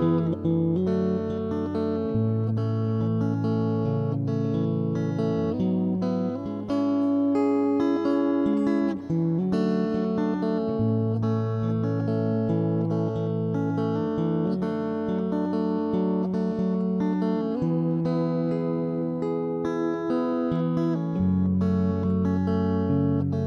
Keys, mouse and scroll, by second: 0.0 ctrl+z, 0.2 ctrl+z, 0.3 ctrl+z, 0.6 middle click, 1.6 ctrl+z, 2.2 Left, 2.2 KP_1, 2.9 middle click, 3.6 right click, 4.1 middle click, 4.5 ctrl+KP_1, 4.6 middle click, 4.8 click, 5.0 ., 5.1 click, 6.4 middle click, 7.2 z, 7.5 middle click, 7.8 middle click, 8.3 right click, 8.4 z, 8.8 ctrl+KP_3, 10.2 c, 11.4 s, 12.2 ctrl+,, 13.5 middle click, 15.2 middle click, 15.9 middle click, 16.8 middle click, 17.4 ctrl+KP_3, 17.6 middle click, 17.9 s, 18.7 right click, 18.9 z, 19.1 Escape, 19.2 z, 19.5 s, 20.2 ctrl+,, 20.2 middle click, 20.9 middle click, 21.5 s, 22.1 middle click, 22.7 right click, 23.0 middle click, 23.3 ctrl+b.